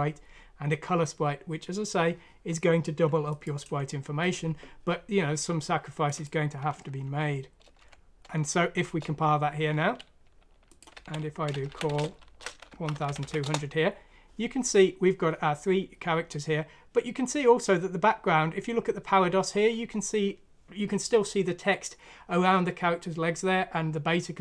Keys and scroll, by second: 7.0 F9, 8.8 Return, 10.9-14.9 typing, 13.4 Return.